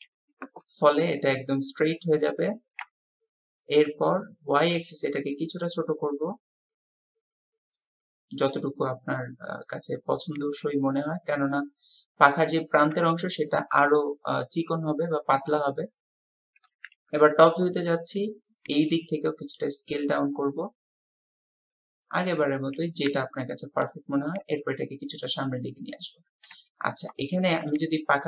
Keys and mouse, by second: 0.6-2.3 drag, 2.9 KP_1, 7.7-12.3 drag, 16.7 KP_7, 18.6-22.4 drag, 23.1 w, 25.5-26.6 drag, 26.7 shift+click.